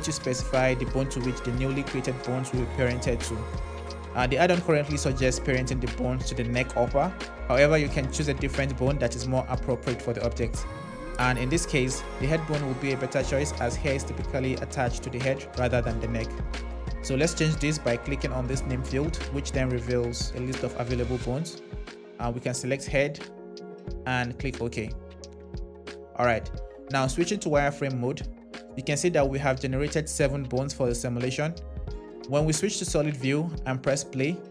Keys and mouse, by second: 27.1 shift+z, 32.8 z, 33.9 space.